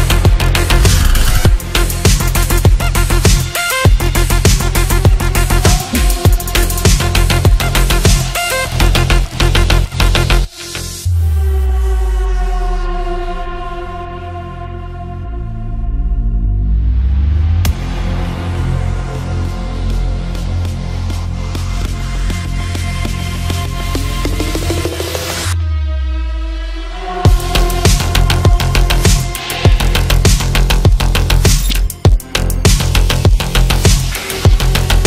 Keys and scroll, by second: 0.8 ctrl+z, 9.2 shift+F2, 14.8 F3, 17.5 F3, 18.1 Escape.